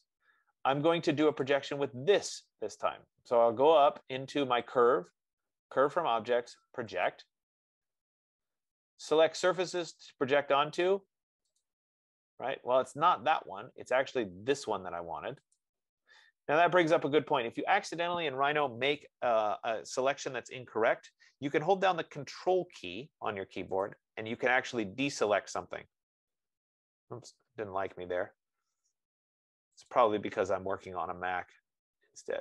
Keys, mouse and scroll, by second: 1.8 click, 5.1-12.9 drag, 15.0 click, 15.8 click, 21.8 F15, 24.3-29.3 right drag, 30.5 click.